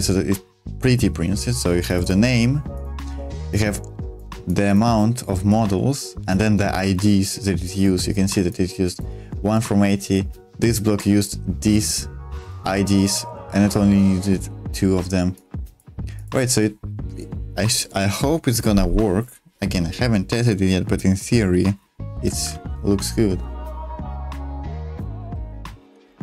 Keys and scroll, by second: 22.3 super+1, 24.4 k, 25.0-25.3 k.